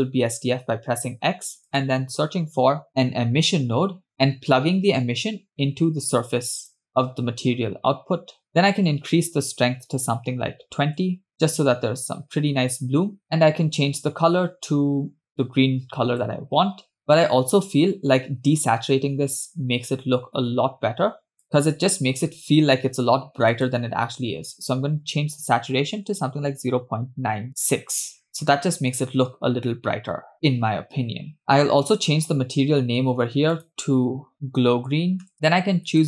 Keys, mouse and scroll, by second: 0.1 x, 1.3 shift+a, 3.7 s, 5.6 click, 9.2-11.3 drag, 13.2 click, 19.3 click, 32.8-33.5 scroll up 1, 33.5 scroll up 2, 33.6-35.3 drag, 35.3 e.